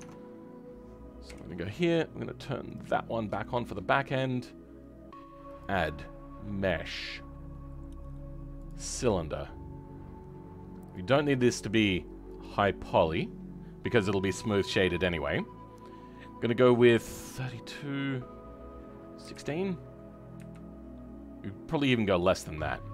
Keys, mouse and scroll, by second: 0.0-1.2 middle drag, 1.2 KP_1, 2.6 click, 2.9-3.4 scroll up 2, 3.4 shift+middle click, 3.8 scroll up 2, 9.5-10.2 scroll down 2.